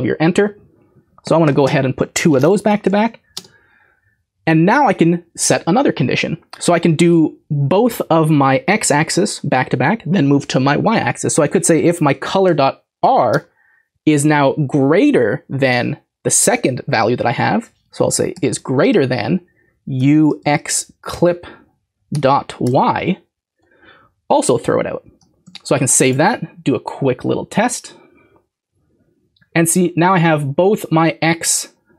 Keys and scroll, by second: 2.7 typing, 11.5-13.0 typing, 18.1-20.5 typing, 21.1 Return, 21.9-22.6 typing, 25.2-26.7 typing.